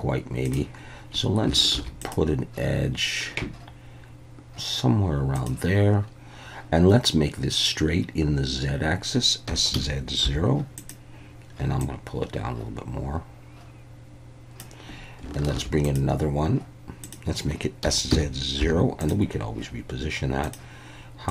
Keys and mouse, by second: 1.7 ctrl+r, 9.5 s, 9.7 z, 10.2 0, 10.7 click, 11.8-14.6 drag, 15.5 ctrl+r, 17.0 click, 17.8 s, 18.1 z, 18.6 0, 19.0 click.